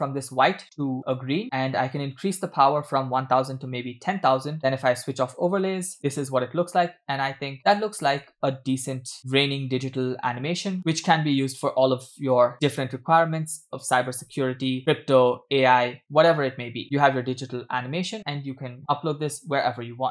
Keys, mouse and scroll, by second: 2.2-4.4 drag, 3.6 0, 3.7 0, 4.9 click, 5.5 space, 7.5 space, 8.1 space, 9.4 space, 11.2 space, 14.3 space, 18.0 space.